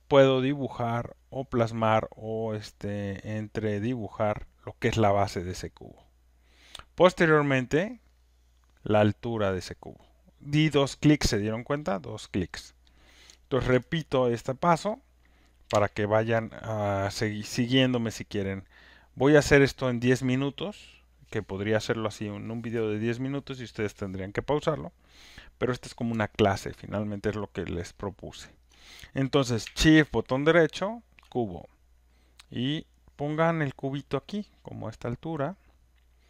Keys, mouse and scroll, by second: 6.0 click, 9.6 click, 13.6 ctrl+z, 14.4 click, 15.0 click, 15.7 Delete, 27.1 alt+right click, 27.7 alt+middle click, 28.8 alt+click, 31.2 shift+right click.